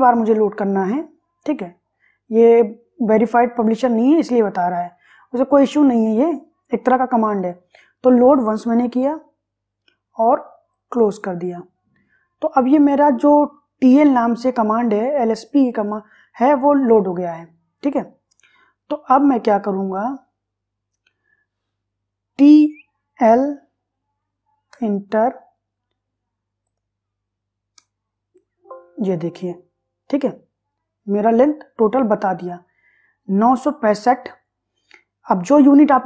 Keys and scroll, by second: 22.7 t, 23.3 l, 24.8 Return, 27.9 Return.